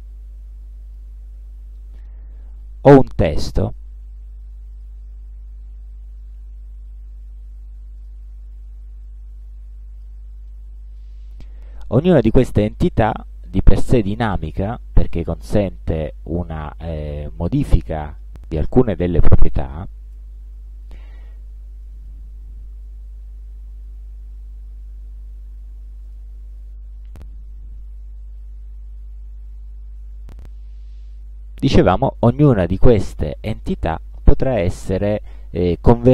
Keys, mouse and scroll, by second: 1.0 click, 1.9 middle click, 3.7 click, 4.8 click, 6.5 a, 8.1 click, 9.2-10.3 drag, 10.6 ctrl+click, 12.9 click, 14.5-15.8 drag, 19.0 space, 19.3 click, 19.8 click, 20.2 click, 21.2 click, 22.9 click, 25.2 click, 26.0 middle click, 29.8 space, 31.0 click, 31.6 click, 33.0 b, 34.0 BackSpace, 35.8 click.